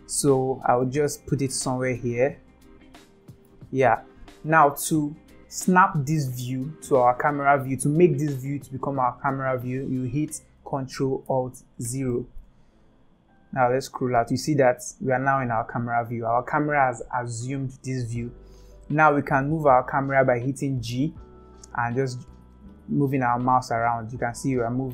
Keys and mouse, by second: 0.9-3.5 middle drag, 11.9 ctrl+alt+KP_0, 20.8 g.